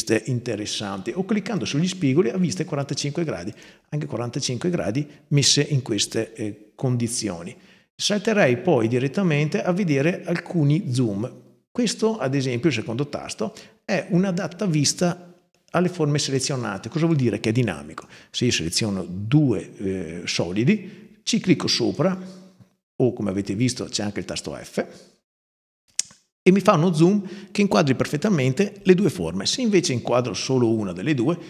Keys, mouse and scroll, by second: 1.4 click, 3.3 click, 16.2 click, 16.9-17.8 drag, 21.6 click, 29.6 click, 30.2 click.